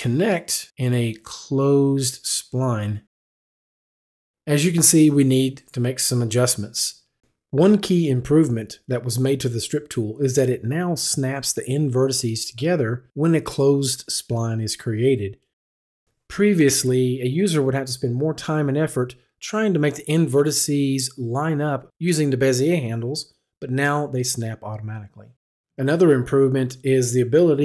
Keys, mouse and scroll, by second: 0.1 click, 4.9 click, 7.5 click.